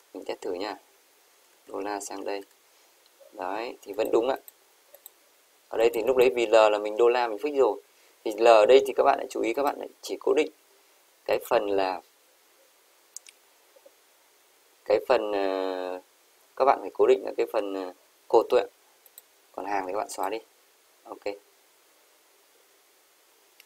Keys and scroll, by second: 1.8 ctrl+c, 2.2 Right, 2.5 Return.